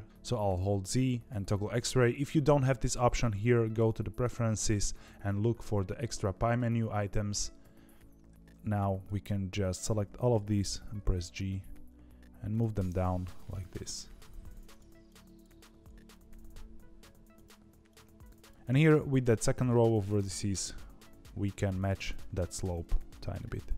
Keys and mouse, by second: 0.0 z, 0.5 z, 9.7 click, 10.9 g, 13.6 g, 18.5 g, 18.5 z, 18.7 click, 19.5 g, 22.2 click, 22.6 g.